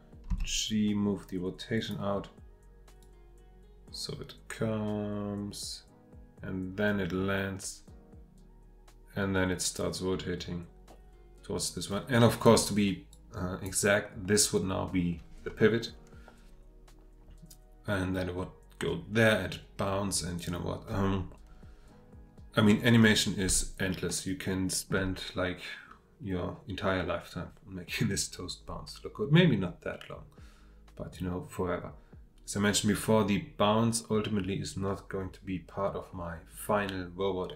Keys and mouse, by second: 0.3 g, 3.3-24.0 drag, 24.0-37.5 shift+middle drag.